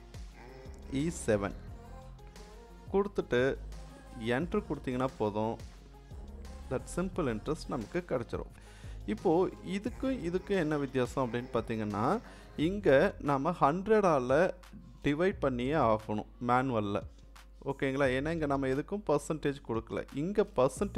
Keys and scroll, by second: 0.9 e, 1.6 7, 4.3 Return.